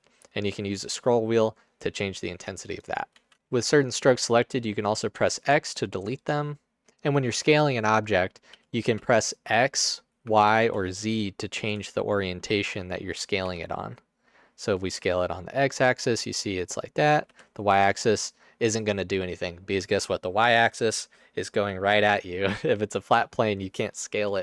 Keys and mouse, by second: 3.2 ctrl+z, 5.3 x, 8.7 s, 8.9 x, 10.4 y, 10.6 z, 11.8 s, 13.5 x, 17.4 y, 22.9-24.4 drag.